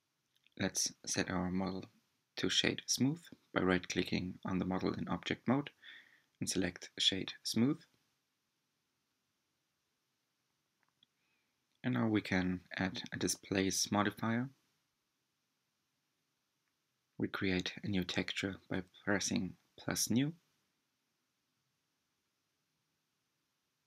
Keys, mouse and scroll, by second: 0.3-3.9 right drag, 3.9-6.4 middle drag, 6.4-7.0 scroll down 2, 10.5-13.5 drag, 15.7-18.9 drag, 19.7-22.8 middle drag.